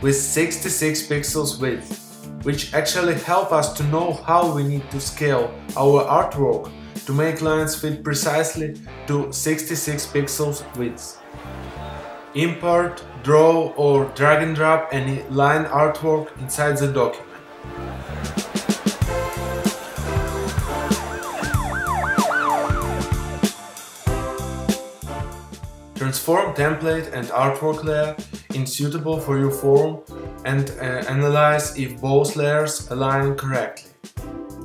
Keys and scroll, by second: 14.6 shift+space, 20.4 super+i, 25.5 super+-, 32.1 Return.